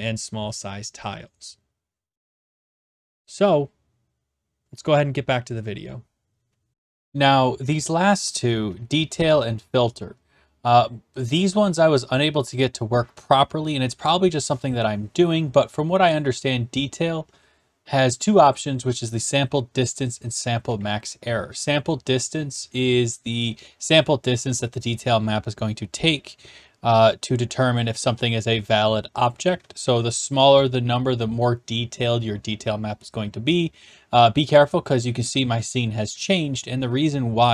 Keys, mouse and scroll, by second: 6.7 click.